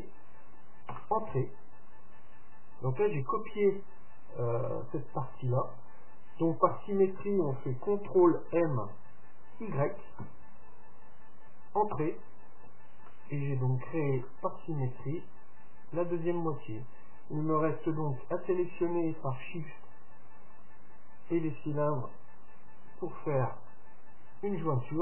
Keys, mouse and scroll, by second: 8.4 ctrl+m, 13.3-16.3 middle drag, 16.5-18.4 middle drag, 18.5-22.5 right drag, 23.5 ctrl+j.